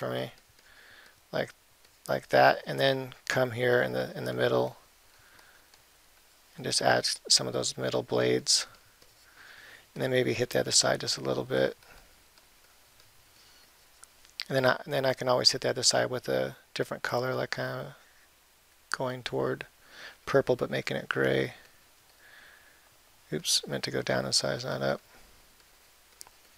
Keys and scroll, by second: 1.6 ], 22.4 ].